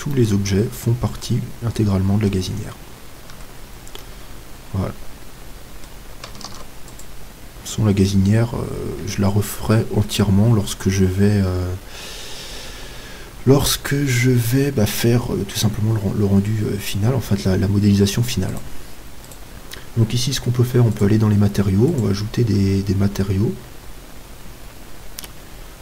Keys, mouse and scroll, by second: 1.1 middle click, 2.9-6.0 middle drag, 3.3 Tab, 6.5 ctrl+s, 18.6-21.3 right drag, 21.0-25.8 drag.